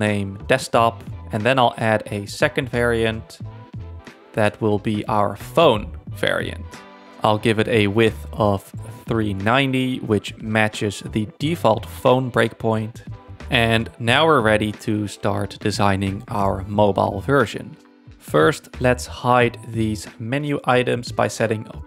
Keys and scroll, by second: 0.9-2.1 typing, 3.2 space, 8.6 super+a, 8.8 3, 9.1 Return, 12.7-13.8 typing, 15.2 z, 16.7 space.